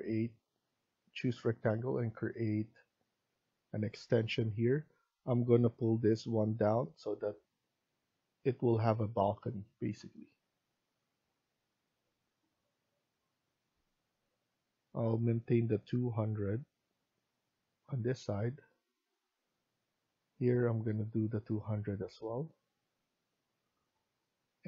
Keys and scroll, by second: 18.6 Escape, 23.5 Escape.